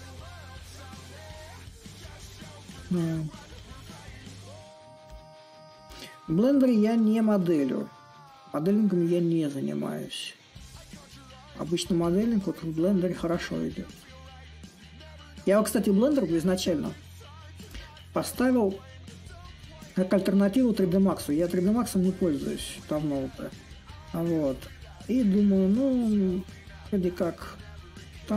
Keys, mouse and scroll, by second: 3.5 s, 3.9-9.9 drag, 12.8 a, 12.8-14.5 drag, 14.5 s, 17.4-22.5 drag, 22.9-28.0 drag, 28.2-28.3 drag.